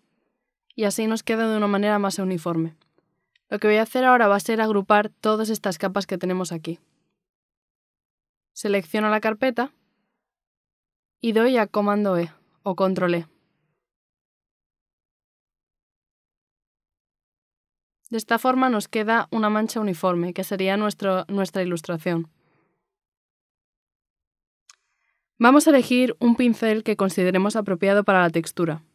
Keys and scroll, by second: 16.5 ctrl+e.